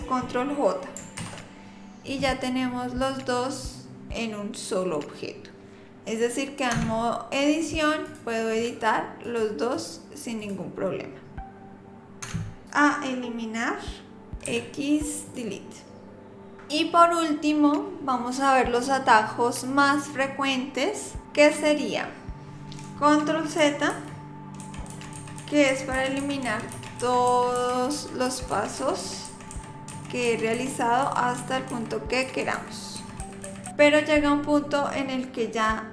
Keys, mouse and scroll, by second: 1.2 ctrl+j, 6.7 Tab, 8.1 click, 8.6 click, 9.2 click, 9.7 click, 10.4 click, 12.2 Tab, 14.4 x, 21.4-21.7 scroll up 1, 21.7-22.5 scroll down 1, 23.9 ctrl+z, 24.6 ctrl+z, 24.9 ctrl+z, 25.2 ctrl+z, 25.4 ctrl+z, 25.7 ctrl+z, 25.9 ctrl+z, 26.2 ctrl+z, 26.4 ctrl+z, 26.7 ctrl+z, 27.0 ctrl+z, 27.3 ctrl+z, 27.6 ctrl+z, 27.9 ctrl+z, 28.2 ctrl+z, 28.6 ctrl+z, 28.8 ctrl+z, 29.0 ctrl+z, 29.3 ctrl+z, 29.5 ctrl+z, 29.9 ctrl+z, 30.3 ctrl+z, 30.6 ctrl+z, 31.1 ctrl+z, 31.4 ctrl+z, 31.7 ctrl+z, 32.2 ctrl+z, 32.6 ctrl+z, 33.0 ctrl+z, 33.2-33.7 ctrl+z.